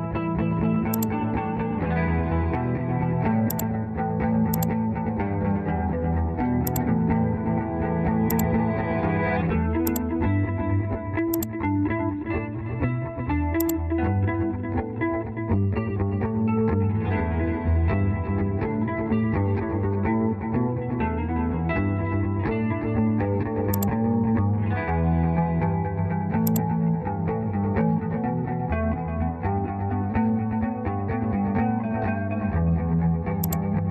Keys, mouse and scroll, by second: 12.6 Return, 14.0 Escape.